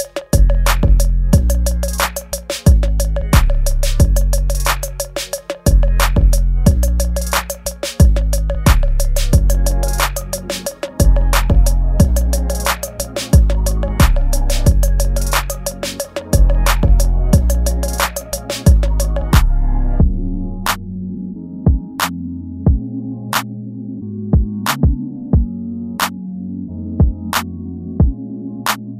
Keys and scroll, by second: 0.4 space, 4.6 ctrl+z, 5.1 ctrl+z, 6.0 space, 6.8 ctrl+z, 7.8 space, 8.5 space, 9.0 space, 10.0 space, 10.7 ctrl+z, 11.0 space, 12.2 space, 12.3 ctrl+z, 12.8 ctrl+z, 13.6 space, 14.1 space, 14.8 space, 15.6 ctrl+z, 17.0 ctrl+z, 17.7 ctrl+z, 18.0 space, 20.2 space, 22.0 space, 22.9 ctrl+s, 26.0 space.